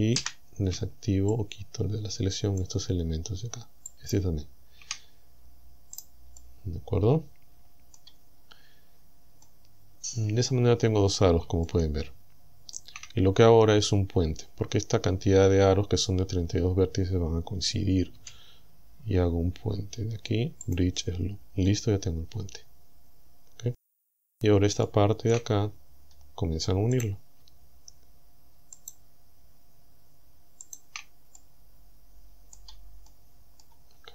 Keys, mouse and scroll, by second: 0.2 c, 1.4-2.8 shift+drag, 3.9 shift+click, 5.2 scroll down 2, 6.0 right click, 6.4-8.2 middle drag, 8.5-8.9 scroll down 2, 9.5-11.4 middle drag, 11.7-13.0 shift+drag, 18.2 w, 20.7 click, 21.7-24.0 middle drag, 24.3-24.6 scroll up 1, 24.9 shift+middle click, 25.7-26.1 shift+scroll up 1, 27.0 right click, 28.8 shift+right click, 30.7 shift+right click, 31.4-32.7 middle drag, 33.1 shift+middle click.